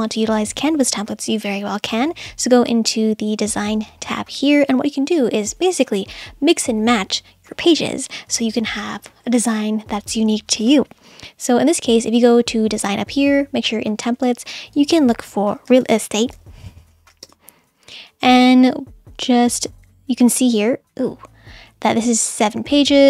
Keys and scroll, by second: 15.3-17.4 typing.